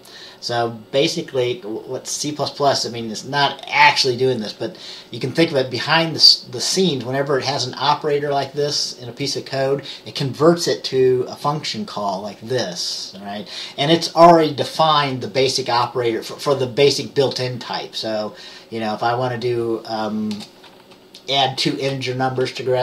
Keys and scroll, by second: 20.5 Return.